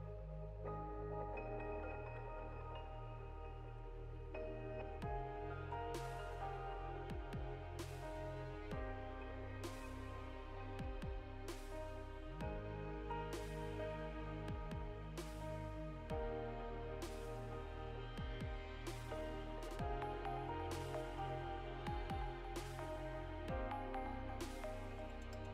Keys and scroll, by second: 2.7 BackSpace, 3.5 ctrl+space, 5.4 Down, 5.5 Down, 7.3 Return, 7.8 ctrl+s, 11.7 Up, 11.8 Up, 11.9 Up, 12.0 Up, 12.2 Up, 12.3 Up, 13.8 Down, 17.0 BackSpace, 18.2 ctrl+space, 20.2 Return.